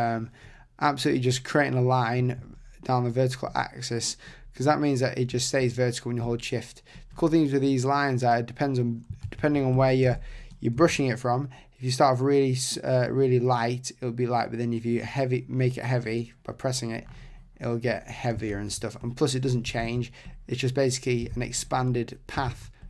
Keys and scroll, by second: 9.2 super+z, 18.5 super+z.